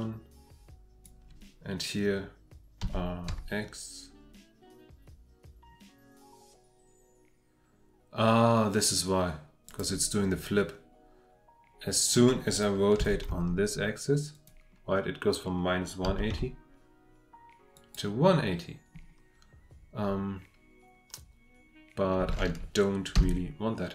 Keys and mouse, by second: 2.8 r, 3.3 x, 9.7 click, 13.0 r, 13.3 x, 14.3 click, 16.3 r, 17.7 click, 23.1 F8.